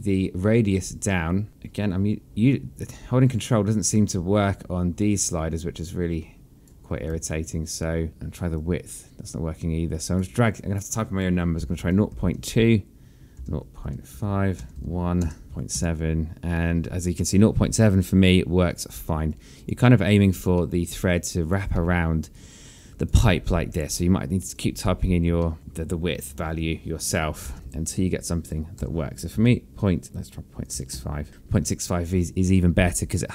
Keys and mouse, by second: 1.5 ctrl+click, 7.8 ctrl+z, 9.3 ctrl+click, 11.3 click, 12.3 KP_0, 12.5 KP_Decimal, 12.8 KP_2, 13.0 KP_Enter, 14.5 KP_Decimal, 14.7 KP_Enter, 15.4 KP_0, 16.2 KP_7, 16.4 KP_Enter, 20.0 alt+click, 21.3 alt+middle click, 21.8 alt+click, 22.4 alt+middle click, 23.5 alt+click, 25.2 click, 26.1 click, 27.6 KP_0, 27.8 Return, 27.8 KP_Enter, 28.3 KP_7, 29.5 BackSpace, 31.2 KP_6.